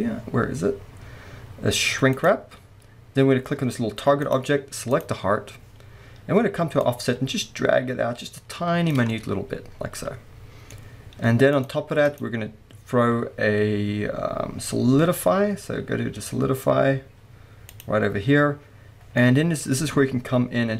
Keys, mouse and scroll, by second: 6.8-9.1 drag, 9.1-11.5 middle drag, 11.5 drag, 12.0-19.2 drag, 19.2-20.7 scroll up 4, 19.2-20.7 middle drag.